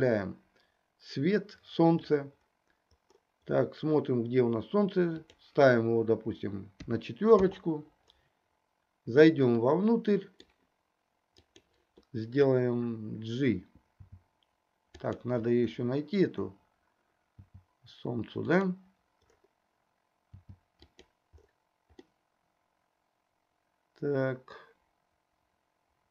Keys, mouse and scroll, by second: 5.2-7.5 drag, 9.9-10.7 middle drag, 11.7-12.1 drag, 14.0 g, 17.4 g, 20.5 g, 22.4-26.1 middle drag.